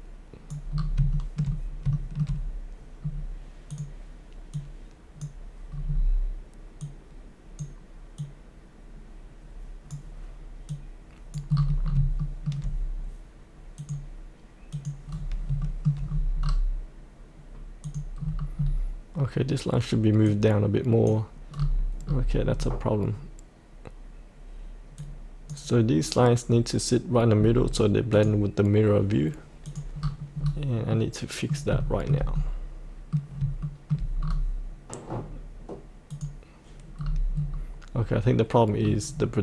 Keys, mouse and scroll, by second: 0.7 scroll up 1, 1.1 shift+middle click, 1.9 shift+middle click, 3.0-3.7 scroll down 1, 3.7-5.7 drag, 5.8-6.8 scroll down 1, 6.8-11.5 drag, 11.5-11.8 scroll up 1, 12.2 shift+middle click, 13.8 click, 15.6 shift+middle click, 16.0-17.8 scroll down 1, 17.8 click, 18.2 scroll down 1, 20.2 click, 21.5-22.0 scroll up 1, 22.5 scroll down 1, 25.0 click, 30.0-30.9 scroll up 1, 30.9 middle click, 31.8-33.5 shift+middle drag, 33.6 shift+middle click, 34.2 scroll down 1, 36.1 click, 37.0-37.3 scroll down 1, 38.8-39.4 scroll up 1.